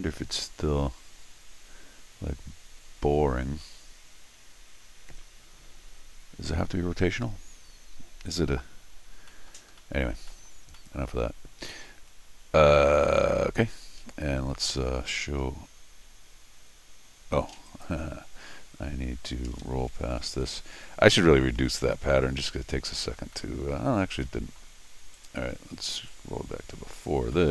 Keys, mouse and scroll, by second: 9.3 middle click, 9.8 middle click, 10.3 middle click, 10.8 middle click, 15.1-15.8 scroll up 3, 15.8-17.3 middle drag, 17.7 click, 20.2 ctrl+alt+shift+r, 23.2 scroll up 2, 23.3 middle click, 24.1 scroll down 1, 24.2 middle click, 25.1 click, 26.0 ctrl+alt+r, 27.3-27.5 middle drag.